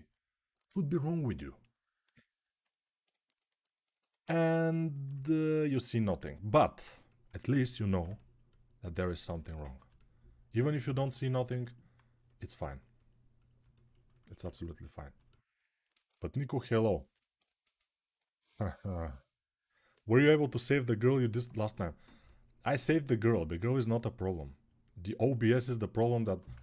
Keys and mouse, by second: 3.7 a, 10.3-18.2 right drag.